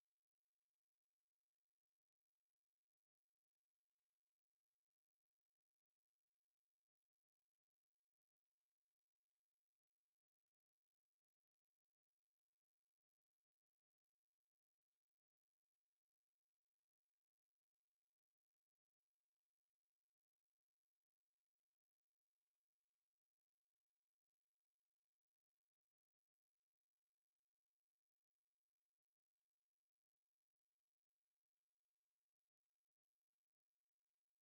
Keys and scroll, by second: 1.1 u, 1.2 space, 3.5 c, 3.6 space, 5.1-6.9 typing, 6.5 Escape, 7.9 Escape, 8.6 o, 11.4 2, 12.0 Escape, 12.2 c, 12.4 space, 13.0 Escape, 14.1 e, 14.3 space, 14.9 5, 15.0 space, 17.0 Escape, 18.3 Escape, 21.4 e, 21.5 space, 21.8 Escape.